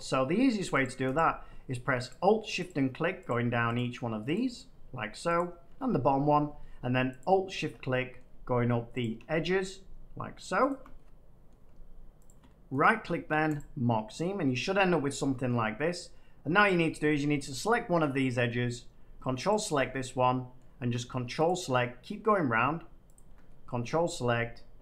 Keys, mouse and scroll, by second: 8.1 middle click, 8.9 click, 9.6 middle click, 10.6 click, 11.5 middle click, 12.2 click, 12.7 right click, 13.5 click, 14.4 shift+middle click, 14.6 scroll, 15.4 shift+middle click, 16.1 shift+scroll, 16.6 click, 17.2 click, 18.9 click, 19.4 ctrl+click, 20.5 middle click, 21.4 ctrl+click, 22.2 middle click, 22.4-23.1 scroll, 22.5 middle click, 23.1 ctrl+click, 23.5 middle click, 23.6 scroll, 23.8 middle click, 23.8 middle click.